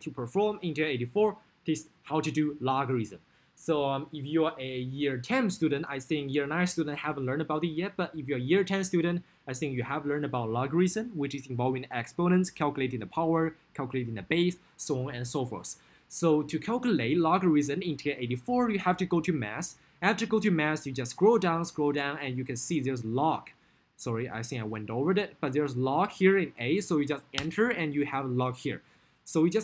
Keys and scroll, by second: 20.7 Down, 20.9 Down, 27.4 Return.